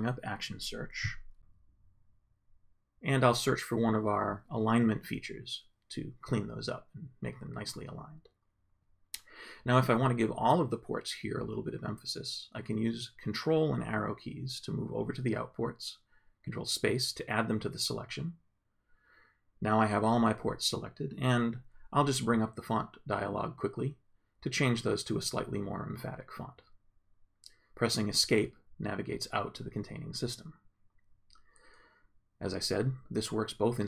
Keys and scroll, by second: 2.9-4.1 typing, 6.8 Return, 13.1 ctrl+Right, 15.2 ctrl+space, 15.7 ctrl+Up, 16.4 ctrl+space, 20.7 ctrl+., 22.5-23.5 typing, 24.1 Return, 24.8 Tab, 25.1 Down, 25.8 Return, 28.4 Escape.